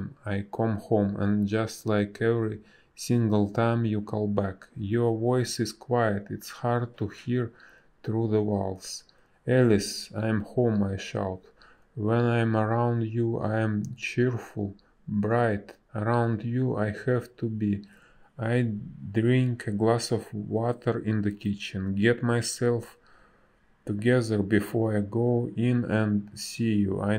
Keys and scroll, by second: 3.3 space, 8.1 ctrl+a, 18.0 space, 19.1 b, 23.8 space.